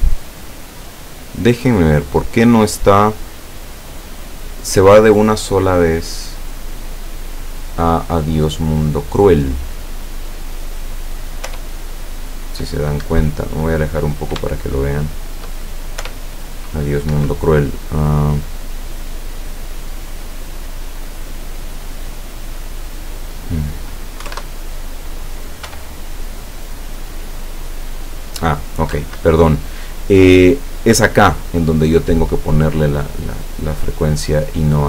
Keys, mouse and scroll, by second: 0.5-4.5 drag, 11.5 p, 13.1 Escape, 13.6 scroll down 1, 14.5-15.6 shift+middle drag, 16.1 p, 17.2 Escape, 23.0 click, 24.2 KP_1, 24.4 KP_Enter, 25.7 p, 28.9 Escape.